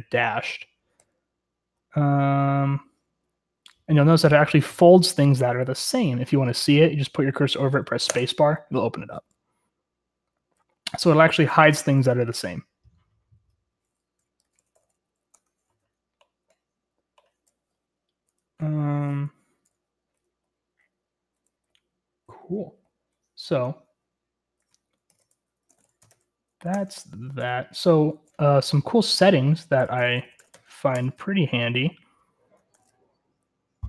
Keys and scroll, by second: 1.1-2.7 k, 5.8-12.9 typing, 14.4-15.6 typing, 17.6-20.1 typing, 21.5-23.7 typing, 25.1-33.8 typing, 26.9 Return, 31.2 Return.